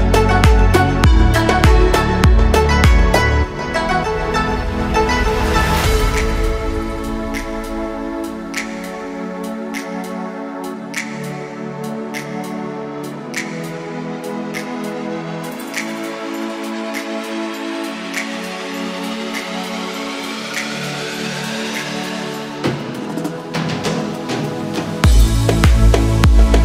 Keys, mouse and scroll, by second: 3.9 click, 4.3 middle click, 5.5-7.1 drag, 7.8 1, 8.1 click, 8.8 click, 9.8 middle click, 10.8 click, 11.2 middle click, 11.9-13.2 drag, 13.4 middle click, 14.9 click, 15.3-16.0 scroll up 2, 15.6 middle click, 16.4 click, 17.4 g, 18.2 click, 18.5 middle click, 19.4 middle click, 20.0 click, 20.3 middle click, 21.0 click, 21.9 middle click, 23.0 click, 23.2 g, 23.9 click, 23.9 g, 24.2-25.6 middle drag, 25.6 click, 25.9 middle click.